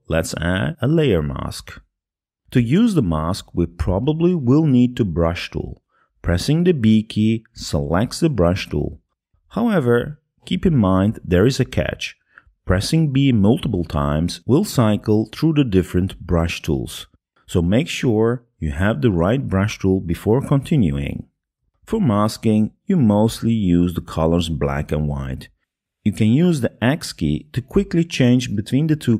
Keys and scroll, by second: 10.0 b.